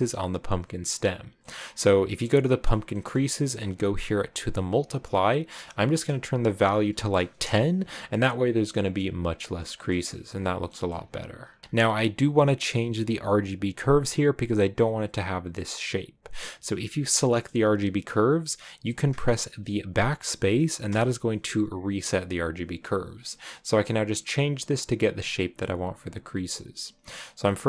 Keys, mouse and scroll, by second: 1.8-2.1 scroll up 2, 2.1-2.5 scroll down 1, 2.5 click, 2.9 middle click, 3.1-4.5 scroll up 2, 4.5-8.4 drag, 9.4 shift+middle click, 10.3 scroll down 5, 10.6-11.6 middle drag, 11.6-20.7 drag, 20.7 BackSpace, 23.8 scroll up 2.